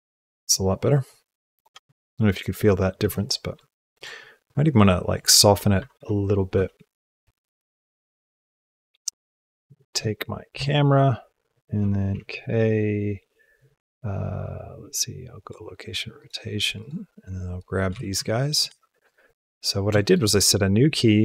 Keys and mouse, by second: 1.4 click, 1.6 space, 2.8 space, 3.3-3.7 shift+drag, 4.3 click, 5.6 Left, 5.8 Left, 6.4 Right, 10.3 shift+b, 11.9 k, 16.0 click, 16.6 click, 16.8-17.4 drag, 17.7 g, 19.0 shift+middle click, 19.3 ctrl+middle click, 19.8 shift+middle click.